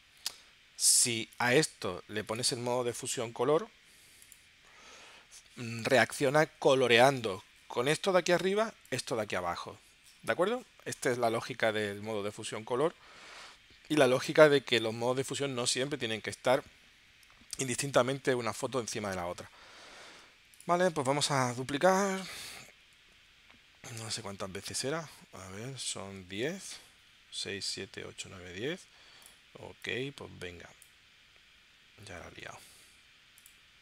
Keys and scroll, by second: 0.2 super+z, 22.4 super+j, 23.2 super+j, 24.1 super+j, 25.1 super+Tab, 26.3 super+Tab, 32.5 super+z.